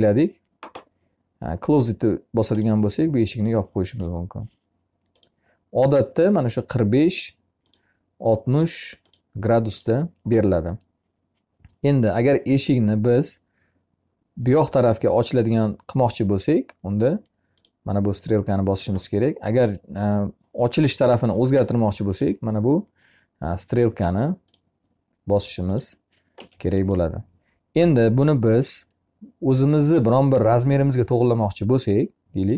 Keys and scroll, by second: 25.7 Escape, 31.8 c.